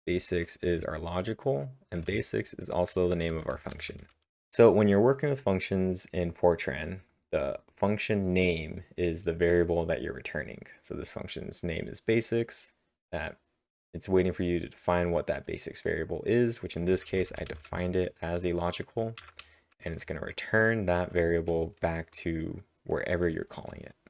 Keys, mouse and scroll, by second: 0.0-0.3 typing, 1.4-4.0 typing, 16.9 typing, 21.0-21.7 typing, 23.2-24.0 typing.